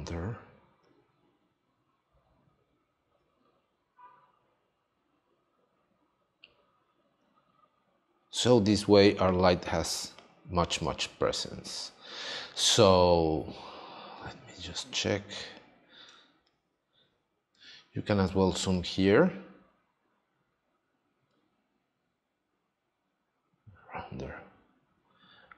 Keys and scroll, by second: 10.8 space, 16.1 space.